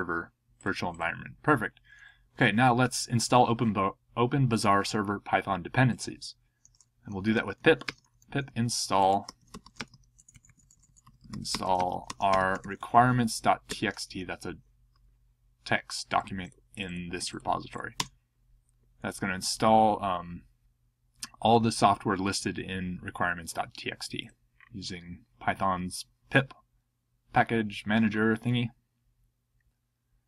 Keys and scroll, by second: 6.8-10.1 typing, 13.7 Tab, 17.9 Return.